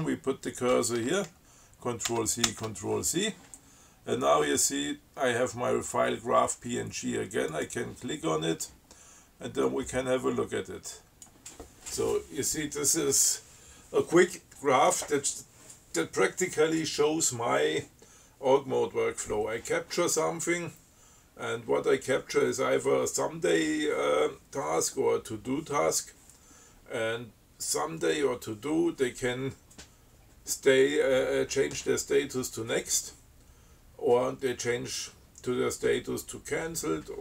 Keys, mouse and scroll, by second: 2.3 ctrl+c, 7.8 click, 9.9-11.7 drag.